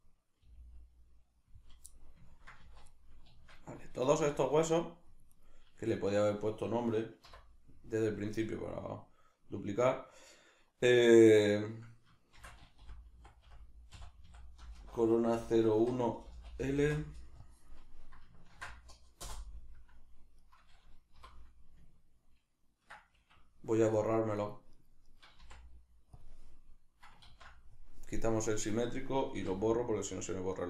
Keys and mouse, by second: 0.5 g, 1.1 click, 1.5 z, 1.9-5.4 middle drag, 2.6 z, 4.1 z, 5.4 right click, 7.3 F2, 20.4 right click, 21.2 F2, 24.0 shift+right click, 24.4 shift+right click, 24.8 shift+right click, 25.1 shift+right click, 25.4 x, 28.5 click, 29.4 x.